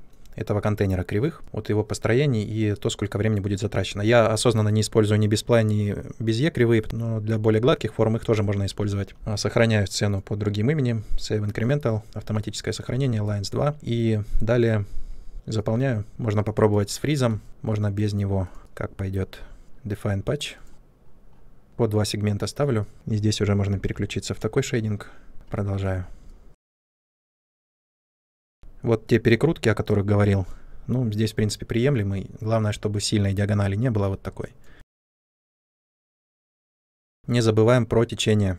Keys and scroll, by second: 23.6 ctrl+/.